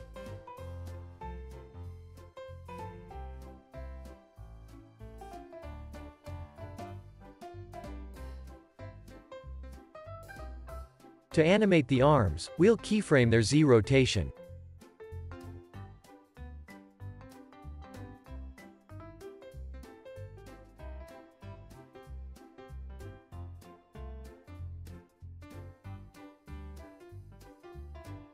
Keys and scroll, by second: 7.4 space, 7.6 super+s, 20.7 alt+x, 21.4 alt+z, 23.3 alt+z, 24.3 x, 26.0 super+s.